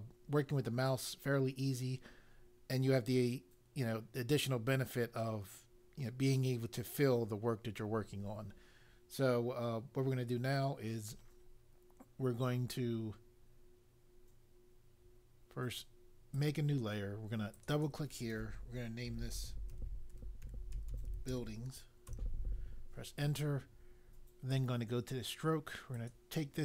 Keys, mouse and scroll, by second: 16.3 click, 17.5 click, 17.7 click, 18.8-21.8 typing, 22.1 Return, 24.5 click, 25.9 click.